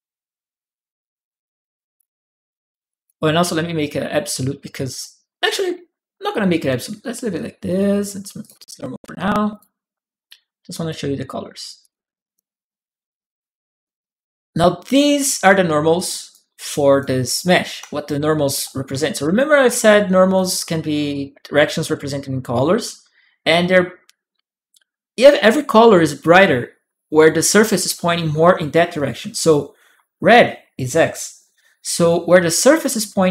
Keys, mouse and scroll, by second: 0.1-1.7 drag, 2.7 click, 8.2 alt+click, 9.3 alt+click, 11.6 alt+click, 12.0 alt+click, 13.6 alt+click, 14.4 right click, 14.8-17.6 drag, 17.5 s, 17.6-19.8 right drag, 18.0 q, 18.6 w, 19.6 click, 19.8 middle click.